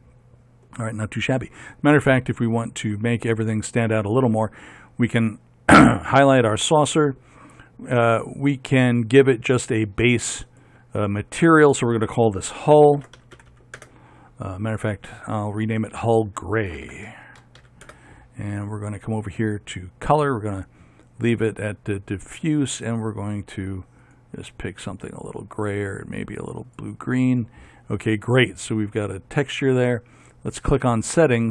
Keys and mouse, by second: 0.0-2.8 drag, 2.8-4.6 right drag, 4.6 middle click, 10.7 click, 13.7-17.1 drag, 13.7 l.